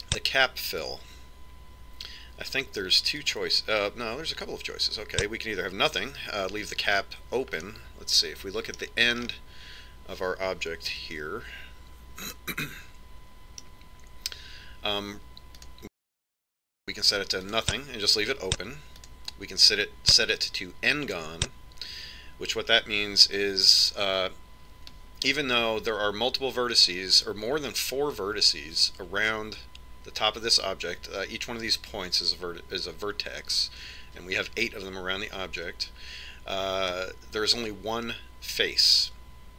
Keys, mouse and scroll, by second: 0.0 click, 5.1 click, 9.6-13.0 middle drag, 12.9 KP_Decimal, 14.3 middle click, 16.1 middle click, 17.6 click, 20.0 click.